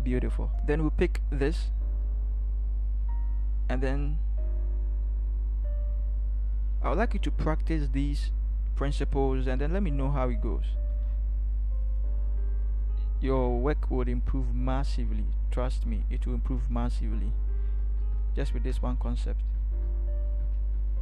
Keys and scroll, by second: 9.2 v, 16.6 ctrl+=, 17.7 Left, 17.9 Left, 18.7 Left, 19.7 Up, 19.7 =, 20.5 Left, 20.5 =.